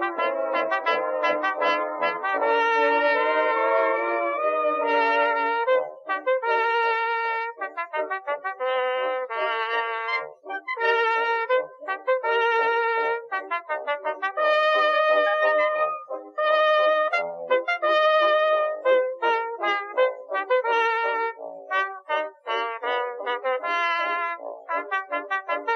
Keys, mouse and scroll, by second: 0.4 ctrl+r, 1.4 ctrl+r, 2.6-3.8 middle drag, 3.9 middle click, 5.8 middle click, 11.6 g, 12.8 click, 13.5 g, 14.7 middle click, 15.9 ctrl+r, 16.9 right click, 17.2 middle click, 17.7 middle click, 18.3 middle click, 18.7 r, 19.6 g, 21.0 middle click, 22.2 KP_3, 22.6 g, 25.6 middle click.